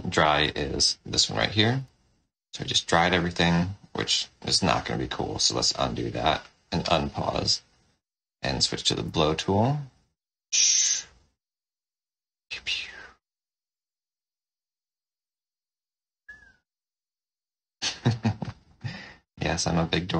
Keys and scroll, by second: 1.6 shift+d, 5.4 ctrl+z, 6.7 d, 9.0 o, 17.1 o.